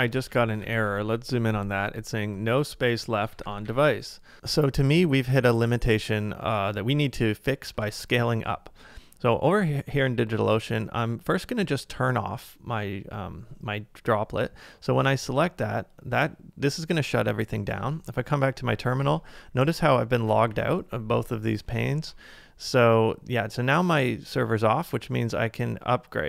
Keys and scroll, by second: 0.7 ctrl+a, 3.5 ctrl+a, 7.8 super+Tab, 17.6 super+Tab, 19.1 ctrl+a, 20.3 ctrl+a, 21.7 super+Tab.